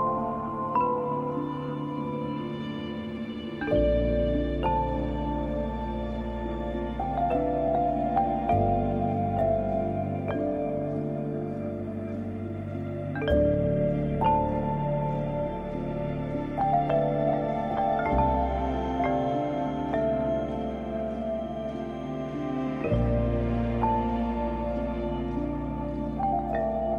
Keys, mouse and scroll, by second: 2.2 scroll down 1, 2.6 ctrl+alt+shift+e, 4.0 ctrl+a, 7.7-10.6 drag, 11.2 click, 12.9 j, 14.0-24.8 drag, 25.2 click, 26.7-26.9 scroll down 1.